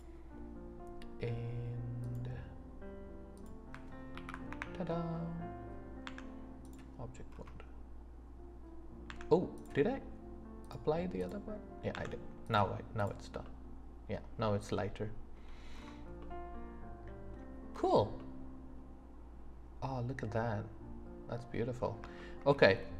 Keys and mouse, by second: 2.1 click, 6.0 Tab, 10.6-13.4 drag, 13.4-14.1 middle drag, 14.2-14.6 middle drag, 14.7 middle click, 16.2 middle drag, 16.7-17.3 middle drag, 18.2-21.8 middle drag, 22.2 shift+middle click.